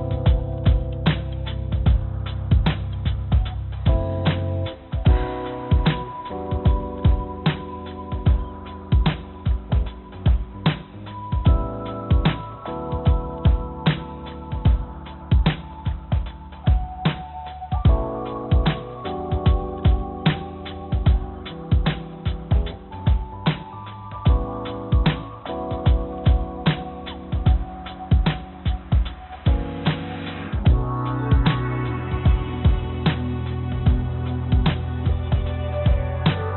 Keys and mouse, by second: 9.4 click, 11.2 click, 16.9 click, 17.1 click, 20.6 click, 21.7-23.3 drag, 26.5 click, 26.7 click, 27.5 g, 30.7 click, 31.1 middle click, 33.9 middle click, 34.0 middle click, 35.4 middle click, 35.5 middle click.